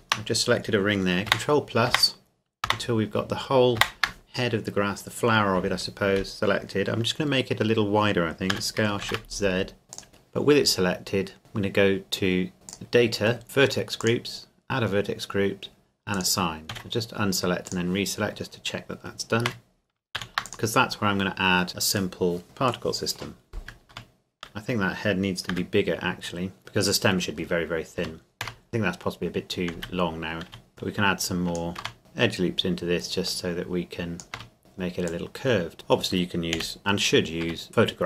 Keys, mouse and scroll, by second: 1.3 ctrl+KP_Add, 8.5 s, 9.0 shift+z, 9.9 click, 12.7 click, 14.0 click, 16.7 a, 17.7 click, 19.4 Tab, 20.1 ctrl+s, 20.5 click, 21.7-22.1 scroll down 1, 22.1 middle click, 23.3-23.9 scroll down 1, 23.9 Tab, 25.5 s, 26.6-27.1 scroll down 1, 27.1-28.0 scroll up 1, 28.0 Tab, 29.7 z, 30.5 a, 30.7 right click, 31.0 click, 31.8 Tab, 32.0 click, 34.3 Tab, 34.6 a, 35.1 click, 35.7 middle click, 36.6 KP_1, 36.8-37.4 scroll down 1, 37.4 Tab.